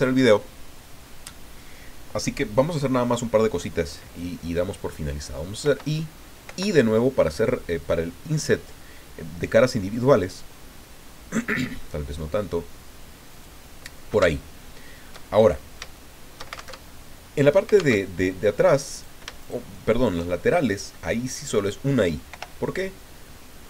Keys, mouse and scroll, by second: 5.6 i, 6.5 i, 13.3 click, 14.6-16.7 shift+drag, 16.7 alt+shift+Tab, 17.9 alt+Tab, 18.9 right click, 19.4 shift+right click, 22.3 i.